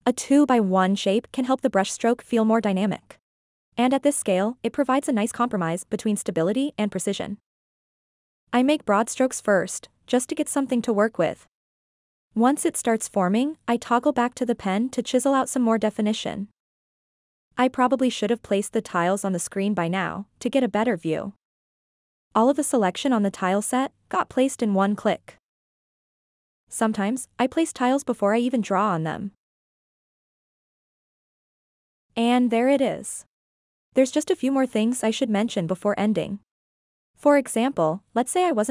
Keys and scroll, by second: 3.5 3, 24.6 d.